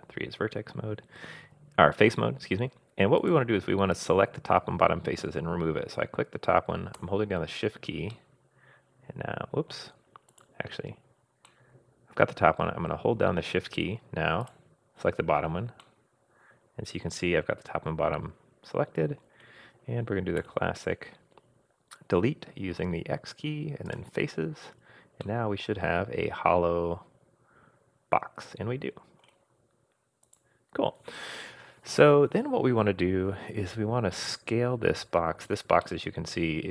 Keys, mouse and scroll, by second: 3.2 click, 3.9 click, 7.9 shift+scroll down 1, 8.1-9.8 shift+middle drag, 10.3 click, 11.5-13.3 middle drag, 14.4 shift+click, 15.8-19.3 middle drag, 20.4 x, 25.2-29.3 middle drag, 30.2 click, 34.7-35.1 scroll up 2, 35.1 scroll down 2, 35.8-36.7 middle drag.